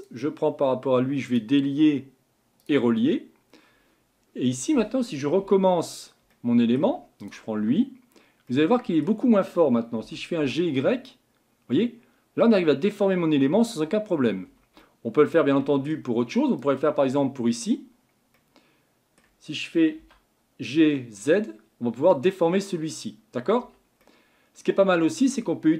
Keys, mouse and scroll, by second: 1.3-5.4 drag, 5.4 Tab, 6.3 middle click, 6.9 Tab, 7.2 click, 7.6 Tab, 8.5-10.0 middle drag, 10.0 g, 14.8-16.6 middle drag, 16.6 click, 18.3-20.0 middle drag, 20.0 g, 24.0-25.7 middle drag.